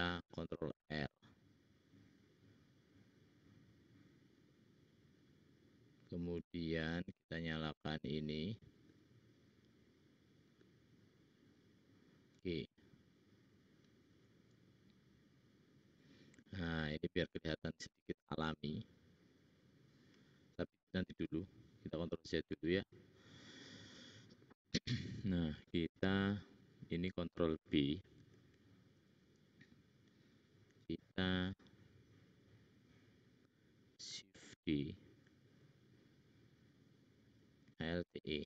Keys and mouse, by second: 10.6-18.0 drag, 12.7 g, 18.2 click, 18.8-20.5 middle drag, 21.4 ctrl+z, 22.1 ctrl+z, 28.3 ctrl+b, 34.9 shift+d, 37.9 alt+e.